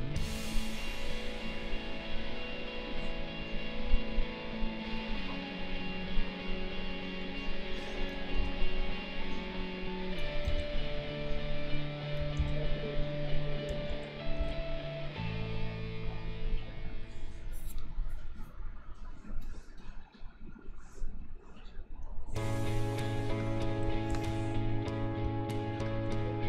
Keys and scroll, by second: 8.4 ctrl+z, 10.4 ctrl+z, 12.4 ctrl+z, 14.4 ctrl+z, 24.1 ctrl+a.